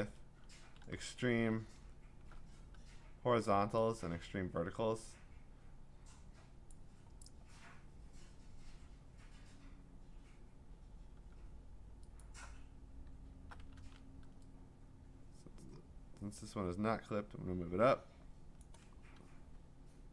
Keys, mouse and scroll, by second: 0.0 Return, 0.8 ctrl+z, 1.6-3.8 ctrl+scroll, 6.7 click, 11.3 click, 12.2 alt+click, 13.7 ctrl+z, 18.6 click.